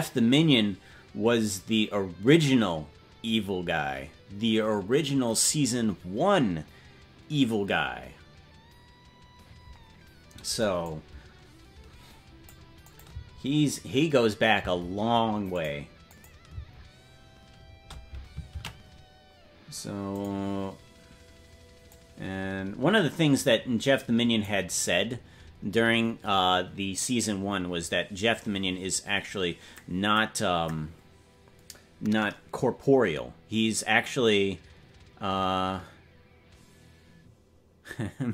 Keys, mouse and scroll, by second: 10.8-12.5 drag, 12.8 click, 13.1 space, 15.1 space, 15.5 click, 16.0 click, 16.5 space, 18.4 space, 20.9 ctrl+s, 21.0 click, 21.9-24.5 drag.